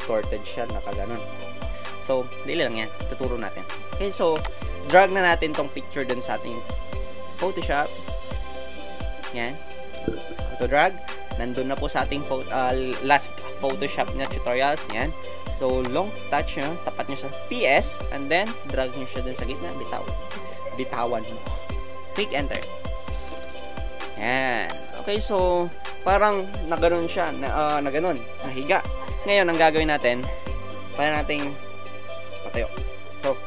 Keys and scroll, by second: 10.6 Escape, 22.6 Return.